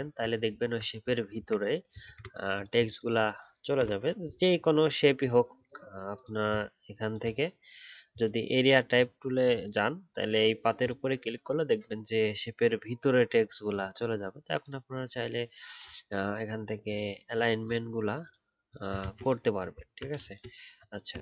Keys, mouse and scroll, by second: 0.4 alt+scroll up 2, 2.0 ctrl+z, 19.0 ctrl+z, 19.7-21.0 alt+scroll down 1, 21.0 alt+scroll up 1.